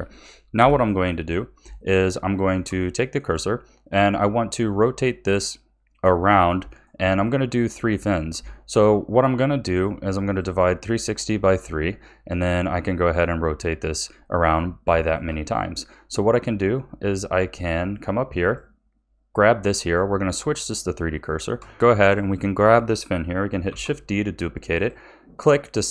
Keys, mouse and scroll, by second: 0.6 KP_7, 1.7-6.0 shift+middle drag, 6.7-10.3 shift+middle drag, 10.3 click, 14.2-18.0 shift+middle drag, 18.4-21.2 drag, 21.2-21.7 shift+middle drag, 22.1 click, 23.6 shift+d.